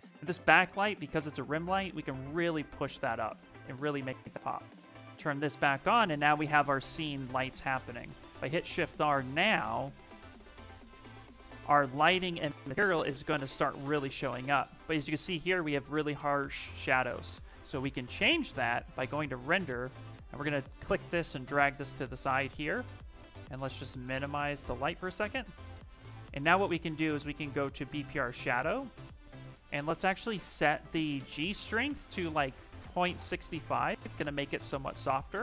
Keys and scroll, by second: 8.0 shift+r.